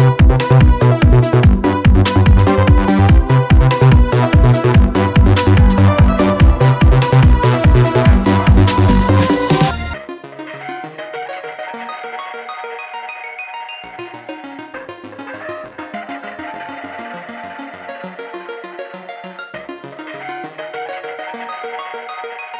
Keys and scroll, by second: 3.8 ctrl+z, 5.1 ctrl+z, 7.3 ctrl+z, 8.2 ctrl+z, 10.1 ctrl+z, 14.8 ctrl+z, 22.0-22.5 typing.